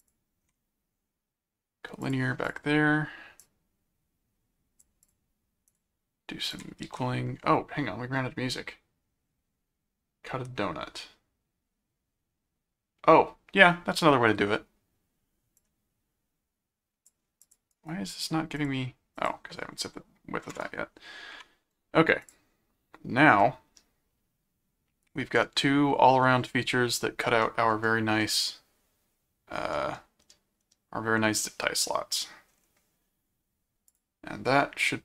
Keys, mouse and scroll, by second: 0.0 ctrl+click, 2.0 click, 3.4 click, 5.0 click, 5.7 ctrl+click, 6.5 ctrl+alt+click, 6.8 ctrl+alt+q, 15.6-17.1 drag, 17.4 click, 17.7 right click, 18.6 click, 19.2 click, 22.2 click, 23.4-26.2 middle drag, 27.0 middle click, 28.3-29.5 middle drag, 29.8-32.1 middle drag, 32.2 middle click, 33.9 click.